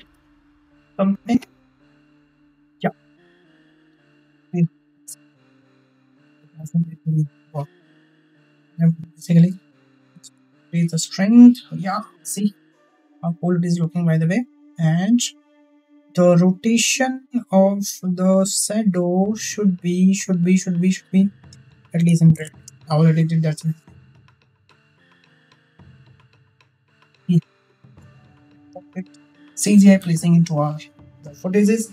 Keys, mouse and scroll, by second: 8.3 click, 9.1-10.2 drag, 15.3 click, 17.5 click, 18.0 click, 19.9 click, 21.1-22.4 drag, 22.1 KP_0, 26.8 shift+middle click.